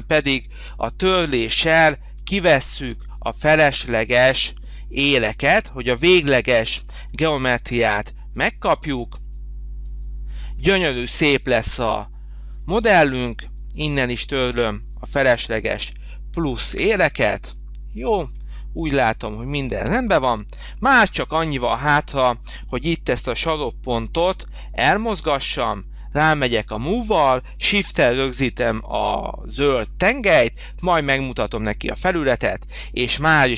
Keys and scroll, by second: 20.1 h, 24.0 m, 27.7 m.